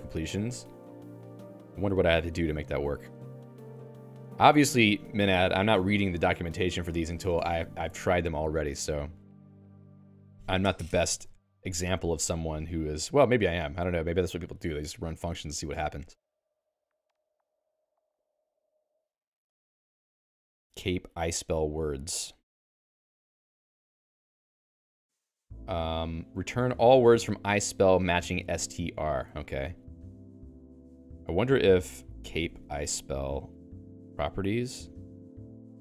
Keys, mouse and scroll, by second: 0.3-4.8 typing, 8.7 Return, 9.4-10.3 j, 11.3-13.1 j, 13.3 j, 15.7 ctrl+d, 16.3-22.9 typing, 24.4 Return, 32.0-33.8 typing, 34.7 Return, 35.6 j.